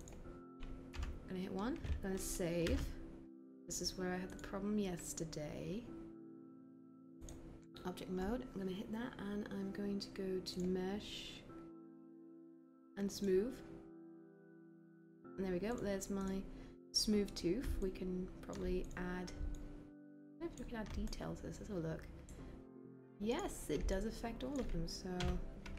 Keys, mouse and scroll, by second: 0.9 1, 25.3 b.